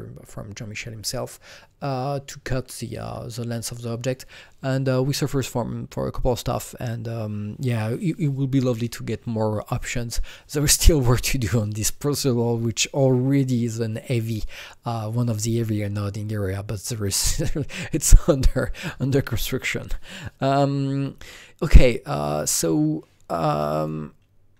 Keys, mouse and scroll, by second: 9.8 click, 9.8 click, 22.1 click, 22.1 click, 23.7 click.